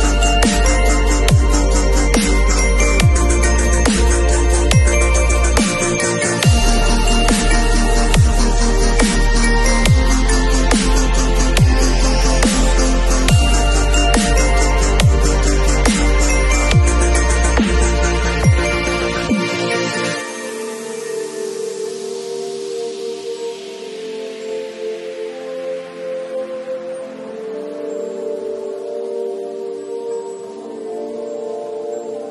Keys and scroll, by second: 0.3 [, 2.4 ], 3.6-7.9 typing, 12.8 b, 14.8-16.1 typing, 19.9 [, 24.8 ], 26.7 v.